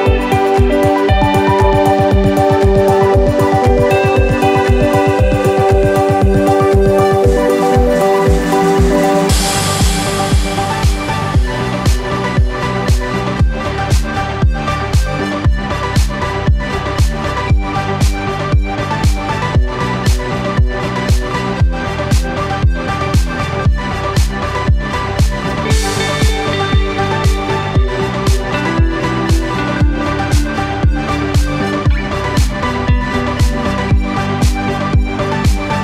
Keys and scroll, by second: 11.5-12.6 typing, 20.5-20.9 typing, 21.3 Return, 22.9 4, 25.1 0, 25.2 Return, 28.6 2, 29.1 BackSpace, 29.2 3, 29.7 0, 29.8 Return, 34.0 5, 34.4 Return.